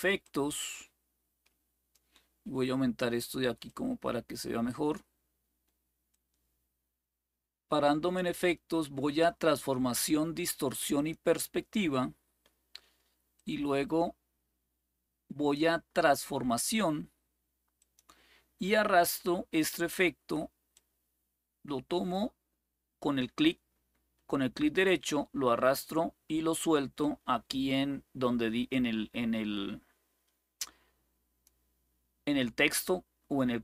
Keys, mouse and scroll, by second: 0.0-1.7 drag, 3.4-4.7 drag, 5.9-7.9 drag, 10.7 click, 13.1-15.3 drag, 17.5 click, 20.5-31.2 drag.